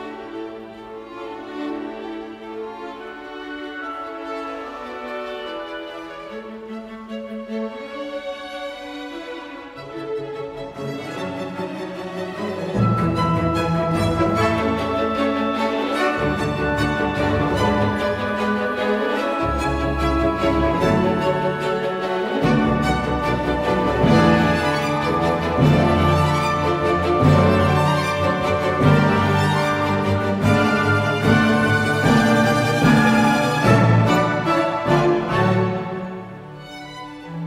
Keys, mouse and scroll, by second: 28.9 w, 30.0 space, 35.3 double click.